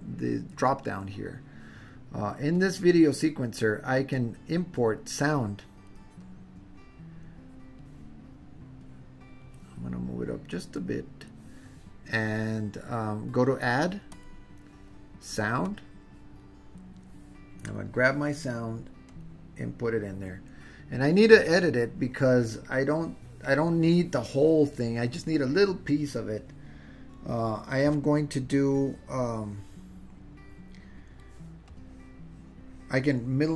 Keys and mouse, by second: 2.6-3.7 drag, 4.1 click, 5.2 click, 6.3-7.9 drag, 8.8-9.5 drag, 10.6-11.3 drag, 14.1-16.0 drag, 31.8-33.5 middle drag.